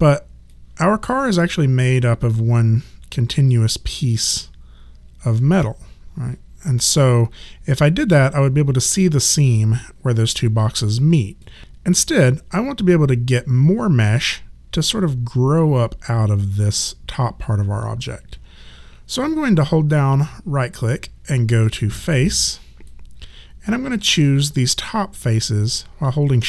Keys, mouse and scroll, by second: 0.5 click, 10.6 click, 19.3 right click, 24.2 click.